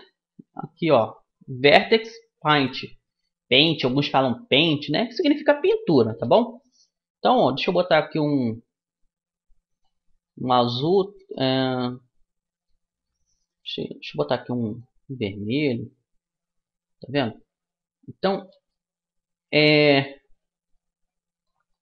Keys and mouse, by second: 5.3-9.7 drag, 10.9-12.7 drag, 13.1-17.2 drag, 18.3-20.4 middle drag, 20.4-21.8 drag, 21.4-21.8 middle drag, 21.5 right click.